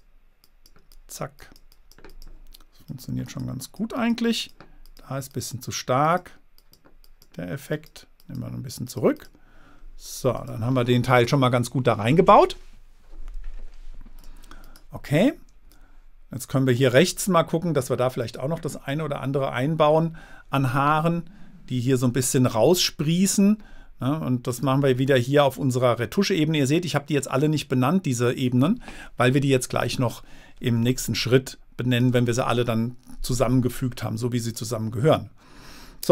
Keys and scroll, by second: 15.9 space, 31.2 space.